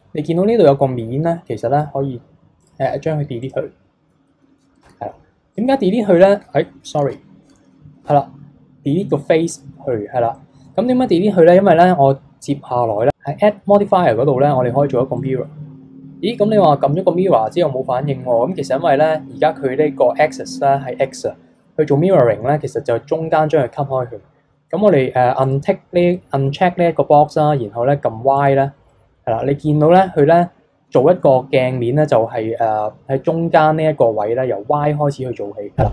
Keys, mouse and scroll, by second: 2.7 click, 3.4 click, 4.8 x, 7.0 ctrl+z, 8.0 x, 10.4-13.1 middle drag, 13.1-15.0 drag, 16.1-16.6 scroll down 3, 16.6-19.6 middle drag, 25.4 click, 26.2-28.4 middle drag, 28.4 click, 28.9-31.9 middle drag.